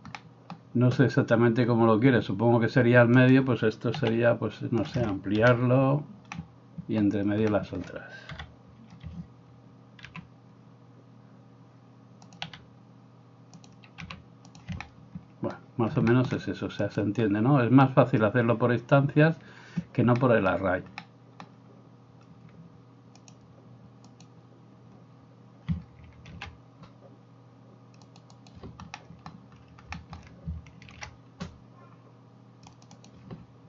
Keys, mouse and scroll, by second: 3.3 middle click, 3.3 right click, 4.0 s, 5.0-16.9 middle drag, 5.5 KP_1, 8.3 KP_7, 10.1 g, 12.5 s, 14.0 g, 16.9 right click, 17.1-23.2 middle drag, 23.2-28.6 drag, 26.3 ctrl+r, 28.6-33.6 middle drag, 30.9 ctrl+r.